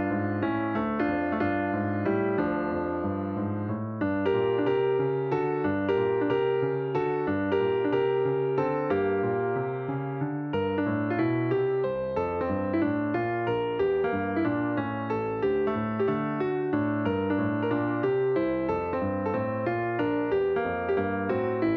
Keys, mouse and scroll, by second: 0.0-3.7 drag, 6.2 click, 7.0 click, 7.7 middle click, 8.1-8.9 scroll up 6, 9.5-10.4 shift+middle drag, 10.4-10.7 scroll down 2, 11.4 l, 12.2 l, 13.7 click, 14.8 click, 15.3-19.5 drag.